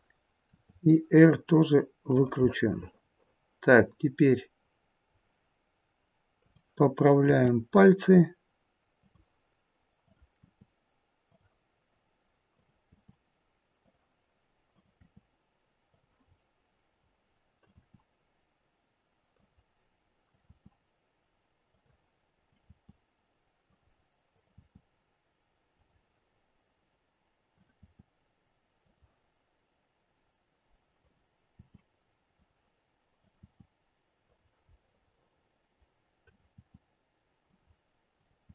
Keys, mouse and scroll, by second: 0.5 r, 2.3 middle click, 6.4 click, 7.2 r, 10.0 click, 10.6 r, 12.4 click, 12.9 r, 14.5 click, 15.1 r, 16.2 middle click, 17.4 click, 17.9 r, 20.1 click, 20.6 r, 22.3 click, 22.9 r, 24.9 r, 27.5 click, 28.0 r, 30.9 click, 31.5 r, 33.1 click, 33.7 r, 34.8 middle click, 36.2 click, 36.8 r, 38.1 click.